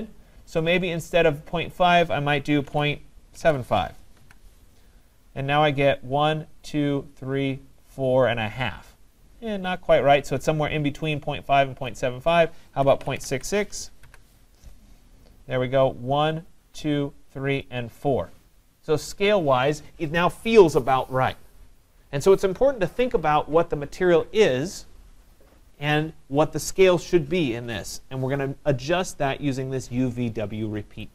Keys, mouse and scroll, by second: 0.8 click, 2.5-4.0 typing, 4.5 Tab, 11.9-17.0 drag, 12.6-13.7 typing, 14.1 Tab.